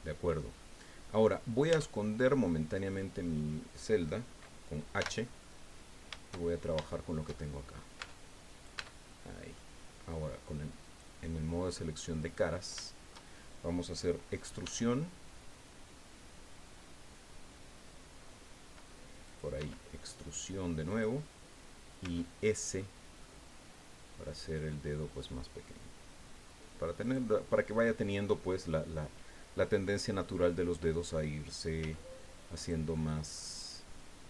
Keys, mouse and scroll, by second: 0.4 middle click, 0.5 scroll up 1, 1.2 scroll down 1, 1.7 Tab, 1.9 click, 2.8 right click, 5.0 h, 5.4 click, 6.5-6.8 shift+scroll up 2, 6.8-7.9 shift+drag, 8.0 shift+Tab, 8.4 shift+right click, 8.7 Tab, 9.1 middle click, 10.8 click, 12.2 right click, 13.6 middle click, 14.6 e, 19.2 click, 19.5 e, 20.9 click, 22.0 s, 22.7-23.4 scroll up 4, 27.0 click, 29.8 click, 30.6 scroll up 2, 31.8 s, 32.6 click, 32.9-34.2 drag.